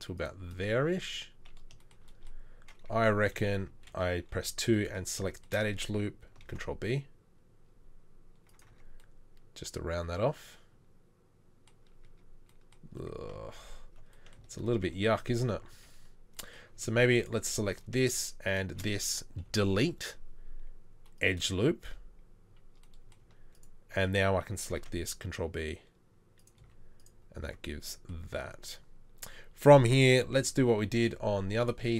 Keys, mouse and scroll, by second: 3.2 2, 6.4 ctrl+b, 8.7 Tab, 12.1 Tab, 13.6 ctrl+z, 14.6 ctrl+z, 14.8 ctrl+z, 15.1 ctrl+z, 15.2 ctrl+z, 15.7 ctrl+z, 19.5 Delete, 24.7 ctrl+b, 26.7 z, 27.4 Tab, 29.3 Tab, 30.4 KP_3, 31.0 z.